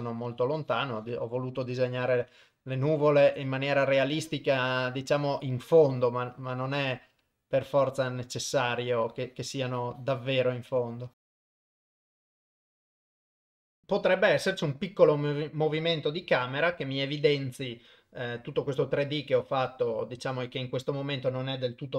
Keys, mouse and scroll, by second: 0.4-1.5 drag, 1.6 click, 2.6 click, 3.1 click, 4.4 click, 4.6 click, 4.9 click, 5.6 click, 6.9 f, 9.2 click, 9.8 click, 10.0 click, 11.1 click, 11.2 click, 11.3 click, 12.3 f, 12.5 click, 12.5 click, 12.6 click, 12.7 click, 12.8 click, 12.9 click, 13.3 shift+space, 13.5 ctrl+Tab, 13.8 ctrl+s, 14.4 click, 16.5 shift+Left.